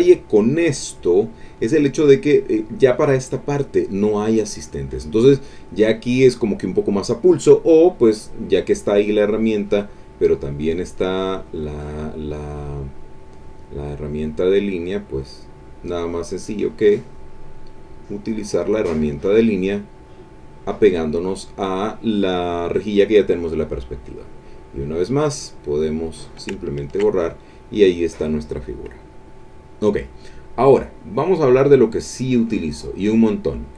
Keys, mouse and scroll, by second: 7.8 click, 11.3 click, 12.9-15.4 drag, 16.6-18.5 drag, 18.9-21.2 drag, 24.1 click, 25.3 click, 26.1 click, 26.6 ctrl+middle click, 27.2 ctrl+middle click, 29.5 middle click, 30.5 click, 32.5 click.